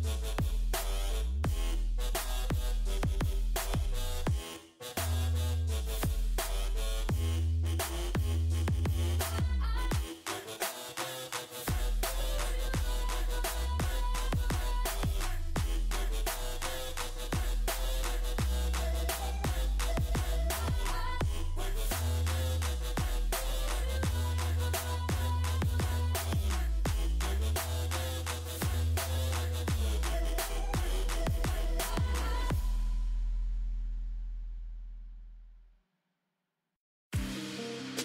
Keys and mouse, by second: 4.5 g, 5.9 g, 7.5 g, 8.7 g, 10.1 g, 14.3 e, 18.2 g, 20.1 g, 21.4 g, 23.0 g, 25.2 g, 26.2 g, 28.3 z, 28.6 Tab, 30.0 Tab, 31.6 z, 32.6 c, 33.4 Tab, 33.8 z.